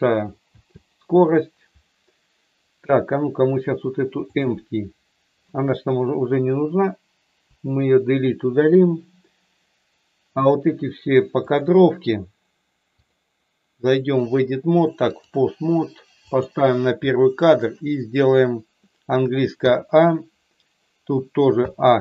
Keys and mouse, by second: 0.4 space, 7.4 Delete, 11.5 click, 13.1-15.3 drag, 16.3 click, 19.5 a, 21.5 a.